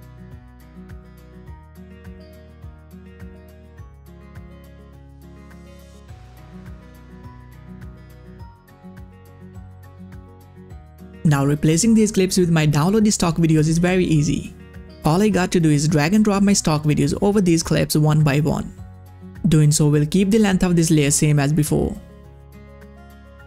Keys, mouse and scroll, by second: 14.6-20.2 drag, 22.4-23.4 drag.